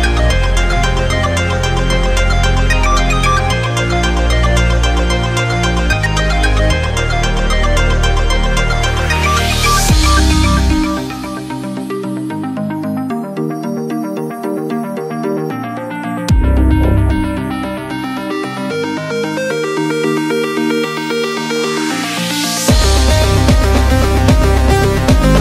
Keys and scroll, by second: 1.6-4.5 typing, 12.6 super+=, 13.0-14.3 typing, 16.6 super+u.